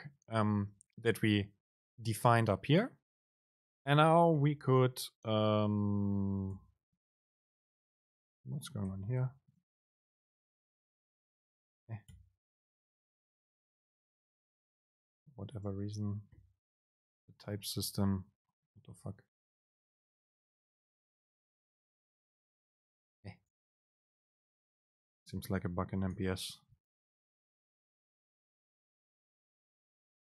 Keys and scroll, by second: 3.8 super+space, 4.5 BackSpace, 7.6 BackSpace, 7.6 super+space, 11.6 BackSpace, 15.7 BackSpace, 15.8 super+space, 17.3 Up, 17.5 End, 17.8 Return, 18.6 super+space, 20.8 BackSpace, 21.2 super+space, 23.3 Right, 24.4 BackSpace, 26.4 alt+super+v, 28.9 Down, 29.2 Left, 29.9 Left, 29.9 super+space.